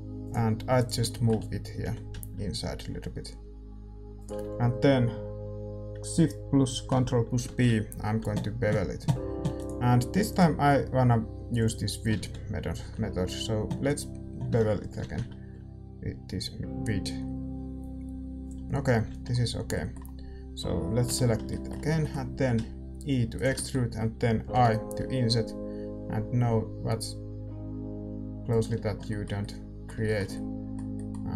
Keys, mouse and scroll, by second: 0.2-2.0 drag, 0.7-2.6 right drag, 1.8 g, 2.6-7.4 middle drag, 7.4 ctrl+shift+b, 11.6 click, 12.1 ctrl+z, 12.8 ctrl+b, 15.0 ctrl+shift+b, 18.7-25.6 middle drag, 19.0 z, 21.0 l, 22.4 e, 24.5 i, 29.0-31.3 middle drag.